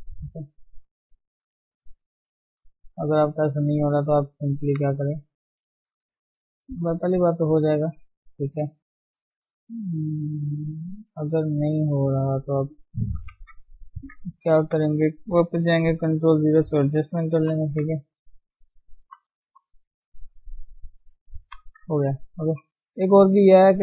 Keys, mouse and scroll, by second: 0.6-2.2 drag, 2.2 middle click, 2.6 click, 3.0 Tab, 3.2-5.0 middle drag, 5.0 Tab, 5.2 middle click, 5.8 click, 6.5 middle click, 7.2 click, 7.4 middle click, 7.8-9.0 scroll up 1, 9.0 scroll up 1, 9.2-10.7 shift+middle drag, 10.7-11.0 scroll up 1, 11.0 middle click, 11.8 Tab, 12.1 middle click, 12.8 click, 13.2 shift+middle click, 13.4 Tab, 13.5-14.5 scroll up 1, 14.8 ctrl+Tab, 15.0 scroll down 2, 18.2 click, 18.4-18.8 scroll down 2, 19.8 scroll down 1, 20.1-21.4 middle drag, 21.4 ctrl+0, 21.8 middle click, 22.2 Tab, 22.4 a, 22.7 middle click, 23.0 scroll down 2, 23.3 middle click.